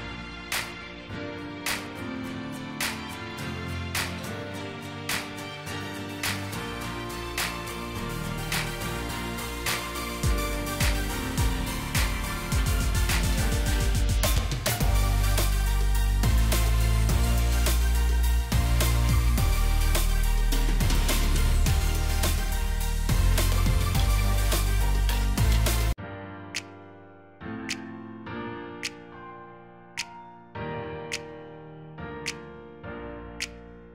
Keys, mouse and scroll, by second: 0.0-0.3 typing, 1.6-2.9 typing, 4.5-8.6 typing, 10.5-16.5 typing, 25.0 shift+click, 31.5 ctrl+g.